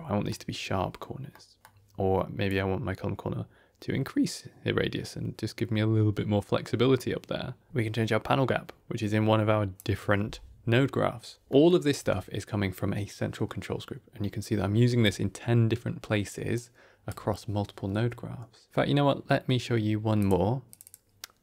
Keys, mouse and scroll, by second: 0.3 scroll down 1, 1.2 middle click, 2.4-5.4 drag, 8.2-9.7 shift+drag, 11.5 middle click, 11.5 scroll down 2, 11.8 click, 11.9 Tab, 12.4-14.0 scroll down 2, 14.0-14.4 scroll up 2, 14.8 d, 14.9 click, 16.2 d, 16.4 d, 16.5 right click, 17.0 d, 19.8 ctrl+o.